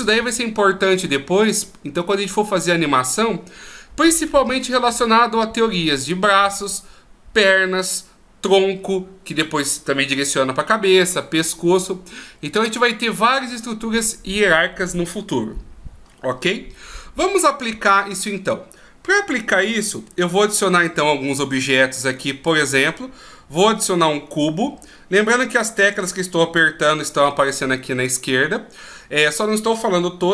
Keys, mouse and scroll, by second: 20.4 shift+a.